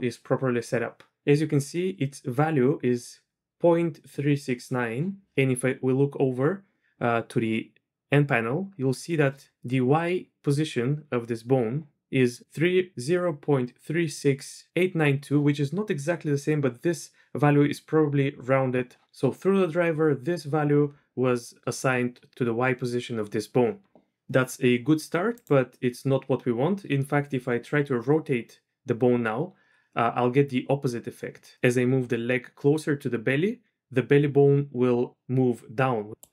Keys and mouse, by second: 25.4 click, 25.8 typing, 27.5 r, 31.8 r.